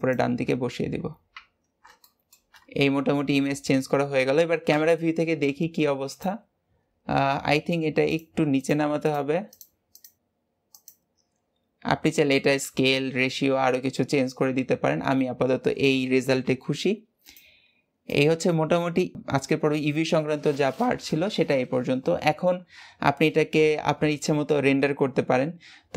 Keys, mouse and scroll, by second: 0.8-1.1 scroll down 2, 1.2 Tab, 1.5 scroll down 4, 1.9-2.5 shift+middle drag, 2.5-4.6 scroll up 1, 4.6 KP_0, 6.0 click, 7.1-7.4 scroll up 1, 7.4-8.0 scroll down 1, 8.0 click, 8.5 shift+drag, 9.0 shift+drag, 9.4 shift+click, 9.8 shift+click, 10.2 g, 17.1 click, 18.0-19.1 drag.